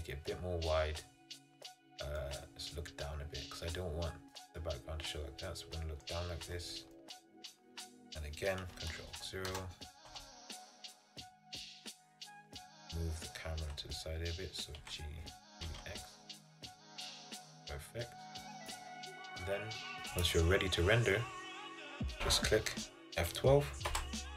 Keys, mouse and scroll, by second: 2.3-5.3 middle drag, 7.1-9.6 shift+middle drag, 9.6 ctrl+alt+KP_0, 14.9 g, 20.4 click.